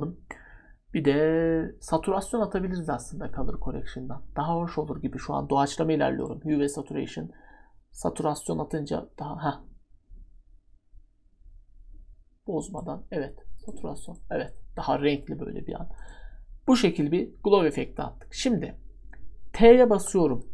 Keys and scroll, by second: 19.9 t.